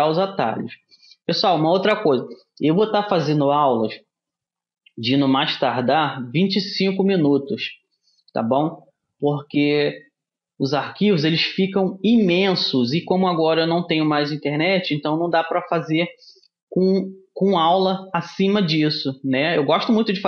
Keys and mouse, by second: 20.1-20.2 middle drag.